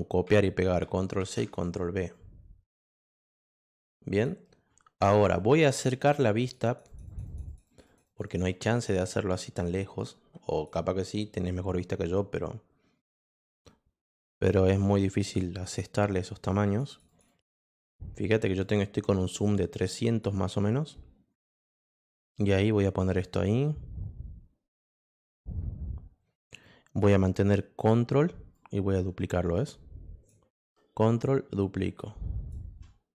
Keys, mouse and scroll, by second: 1.2 ctrl+v, 2.1-4.2 drag, 6.4 click, 6.6 click, 6.8 click, 7.0 click, 7.2 click, 7.4 click, 7.6 click, 7.8 click, 8.0 click, 8.2 click, 8.4 click, 8.7 click, 10.0 click, 12.1 click, 14.9 shift+click, 16.6 click, 16.8 click, 17.0 click, 17.2 click, 17.4 click, 17.6 click, 18.6-20.2 drag, 21.4-25.2 drag, 26.6 click, 27.8 click, 28.5-30.2 drag, 30.6-32.5 drag.